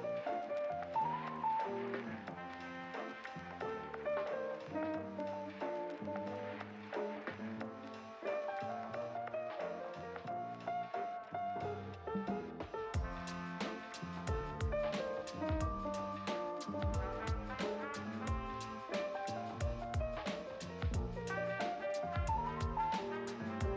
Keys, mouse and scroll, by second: 2.0 click, 2.2 ctrl+s, 3.0 KP_1, 3.2 scroll down 4, 3.8 click, 3.8 KP_3, 4.0 KP_1, 4.1 scroll up 5, 4.4 click, 4.7 ctrl+s, 5.0 click, 5.4-6.0 scroll up 3, 6.0-6.4 scroll up 4, 6.4-7.6 scroll down 4, 7.6 scroll down 42, 15.0 click, 15.4 click, 15.8 shift+click, 17.3 shift+click, 17.8 ctrl+l, 18.5-18.9 drag, 18.9 scroll up 1, 19.0 scroll down 3, 19.2 click.